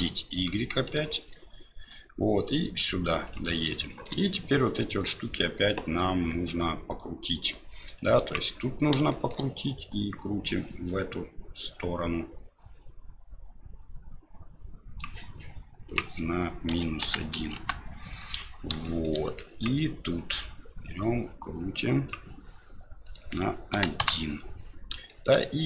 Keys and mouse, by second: 3.9 shift+middle click, 8.1 click, 9.1 shift+middle click, 9.9-15.0 drag, 15.8-18.2 drag, 18.9 shift+middle click, 19.5 click, 21.0-22.1 drag, 23.0-24.5 drag, 25.1 shift+middle click.